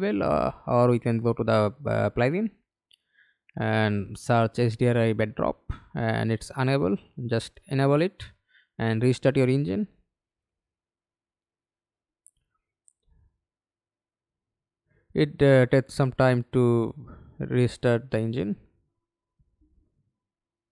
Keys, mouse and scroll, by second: 5.3 h, 5.6 d, 6.1 r, 6.4 i.